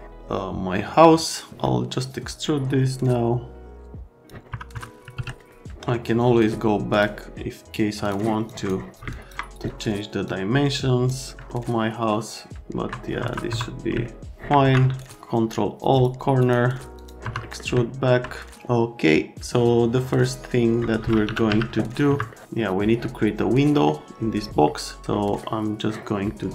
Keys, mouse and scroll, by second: 2.4 click, 4.4 right click, 4.5 F3, 4.7 F3, 5.4 right click, 6.9 click, 8.0 click, 8.4 click, 9.1 ctrl+click, 10.2 click, 11.4 alt+middle click, 13.2 F3, 13.4 F3, 14.0 alt+middle click, 14.6 ctrl+a, 17.2 F3, 17.4-18.0 scroll down 2, 21.0-21.9 typing, 22.0 F3.